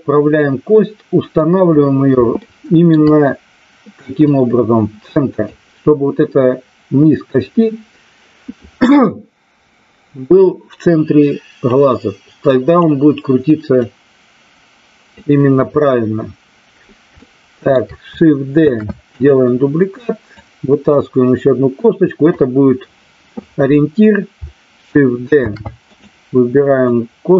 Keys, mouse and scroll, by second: 2.4 shift+middle click, 4.3-5.4 drag, 11.7-12.9 drag, 13.9-15.1 drag, 17.3 shift+middle click, 18.6 shift+d, 20.3-22.3 drag, 25.4 shift+d, 25.9 click, 26.9-27.3 drag.